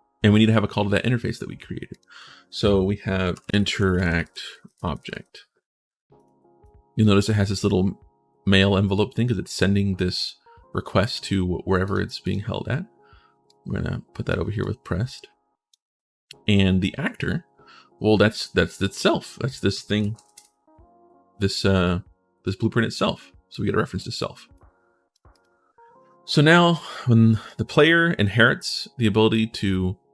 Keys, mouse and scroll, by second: 1.7 click, 3.0-5.3 typing, 5.9 click, 6.4 click, 11.6 click, 12.0 click, 13.2 click, 14.4-15.5 drag, 18.6 right click, 19.7 s, 20.0 f, 21.6 click, 23.3 click, 24.3 click, 25.1 click, 27.2 right click.